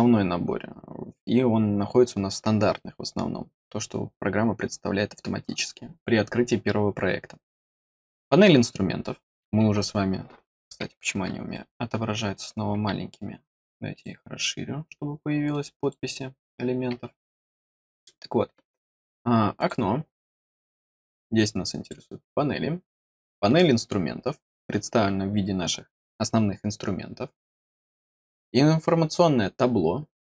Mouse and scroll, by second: 13.4 click, 15.4 click, 19.5 click, 21.7 click.